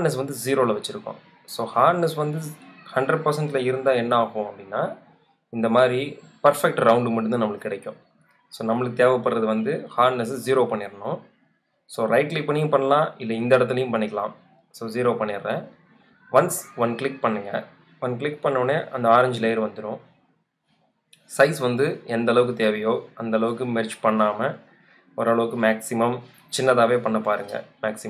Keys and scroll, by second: 19.4 v, 19.9 super+v, 21.1 b.